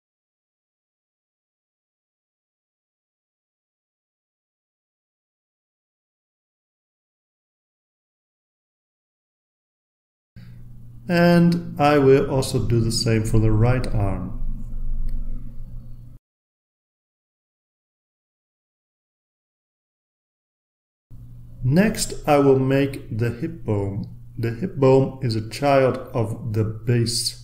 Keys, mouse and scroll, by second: 0.7-2.8 typing, 3.9-5.8 typing, 6.0 Return, 10.5 click, 11.4 click, 12.1-12.4 drag, 13.3-14.1 drag, 14.1 right click, 15.0 drag, 15.1 scroll down 1, 15.8 click, 17.4 scroll down 1, 18.0-19.1 drag, 18.8 right click, 19.4 click, 19.6 scroll down 1, 19.9 click, 20.5 click, 23.7 click, 24.2 right click, 26.8 click.